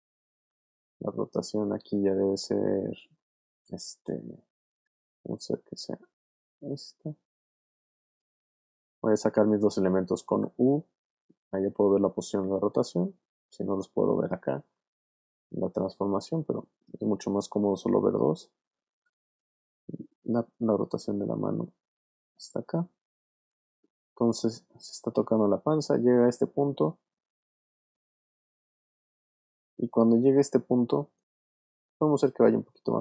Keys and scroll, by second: 0.3 r, 10.4 u, 17.3 u, 32.3 v.